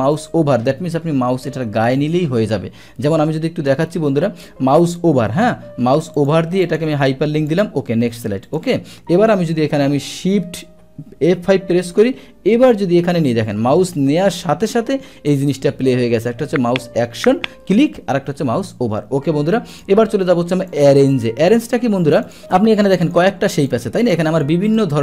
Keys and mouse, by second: 0.1 click, 6.2 click, 6.6 click, 7.5 click, 8.4 click, 11.3 shift+F5, 14.5 Escape, 15.4 click, 19.7 click, 20.7 click, 21.5 drag, 22.2 click, 22.5 click, 23.7 click, 24.8 click.